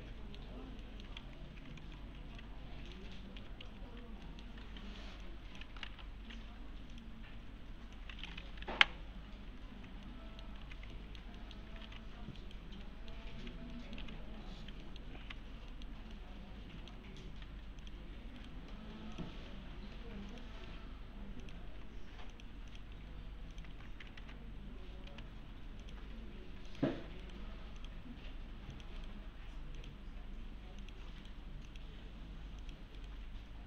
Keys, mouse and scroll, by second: 1.2 alt+x, 1.8 alt+x, 2.4-3.0 alt+middle click, 3.1-5.0 typing, 3.9-4.3 scroll down 1, 4.3 middle click, 5.2-5.9 click, 7.3 1, 8.0-8.6 click, 10.1-10.7 alt+middle click, 10.6 alt+q, 10.9 alt+middle click, 11.8 alt+q, 12.4 right click, 12.9 middle click, 13.7 middle click, 14.0 q, 14.8 middle click, 15.2 w, 15.7 middle click, 15.9 scroll down 1, 16.1-17.1 alt+middle click, 17.4 3, 17.8 click, 18.4 right click, 19.2 click, 20.0 1, 20.3 click, 21.4 ctrl+click, 21.6 ctrl+shift+e, 22.3 click, 23.5 ctrl+click, 23.7 ctrl+shift+e, 24.2 alt+c, 25.1 s, 25.8 click, 27.2 right click, 27.8 click, 29.0 right click, 29.8 click, 31.2 right click, 31.7 click, 33.0 right click.